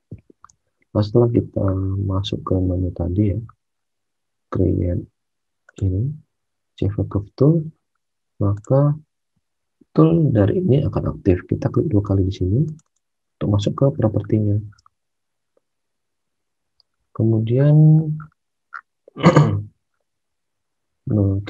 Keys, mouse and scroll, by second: 0.4 alt+Tab, 14.6 alt+Tab.